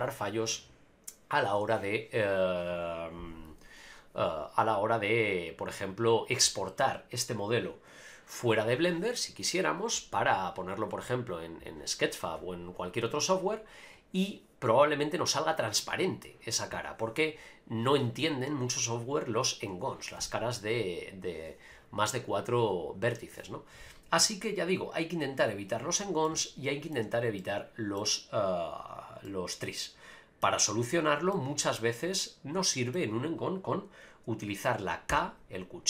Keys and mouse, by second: 26.3-26.9 middle drag, 27.0 Tab, 27.4-27.9 middle drag, 29.2-30.4 middle drag, 31.3 middle click, 32.7 shift+middle click, 35.1 k.